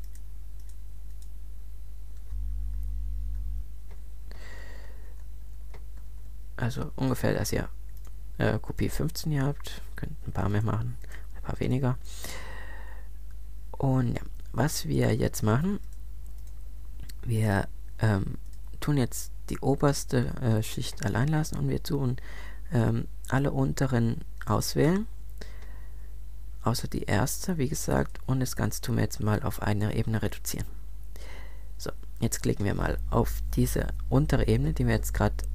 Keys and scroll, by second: 2.7 super+z, 5.0 alt+super+Up.